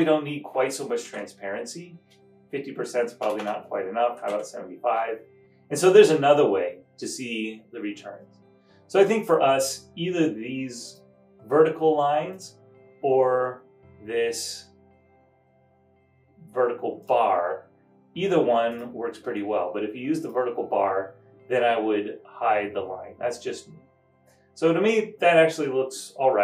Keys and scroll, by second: 0.9-1.7 typing, 3.3-4.7 typing.